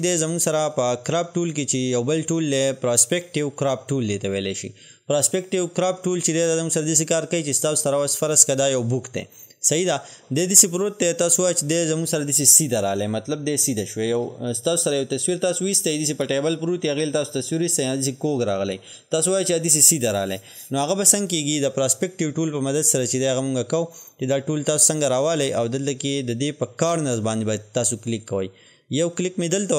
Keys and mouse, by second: 0.2-25.0 drag, 29.6 click.